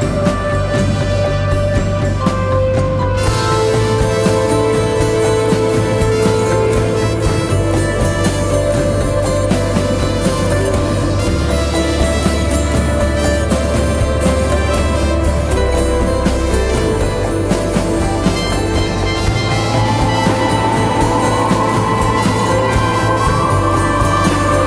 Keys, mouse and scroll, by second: 16.2 double click, 22.1-22.9 typing, 24.1 double click.